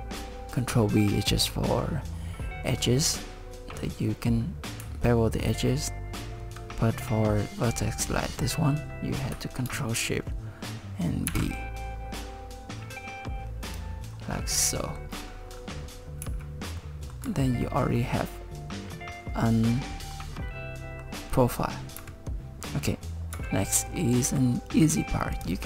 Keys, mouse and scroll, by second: 11.3 ctrl+shift+b, 13.7 ctrl+shift+b, 14.3 scroll down 3, 14.8 shift+middle click, 15.5-16.2 scroll down 2, 16.2 z, 16.8 middle click, 17.2 Tab, 17.6 middle click, 18.0 middle click, 20.4 middle click, 22.0 KP_1, 22.9 scroll down 3, 23.3 Tab, 23.6 middle click, 24.3 Tab, 25.3 click.